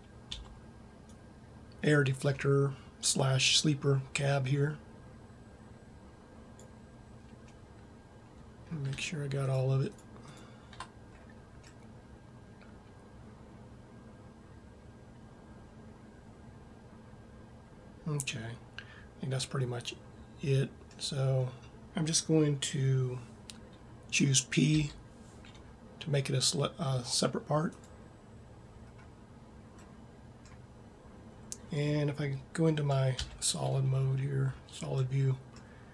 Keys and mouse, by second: 0.3 b, 7.5 middle click, 11.2-15.9 middle drag, 18.4 middle click, 19.2 middle click, 24.6 p, 28.8 middle click, 33.1 z, 33.9 middle click, 34.6-35.9 middle drag.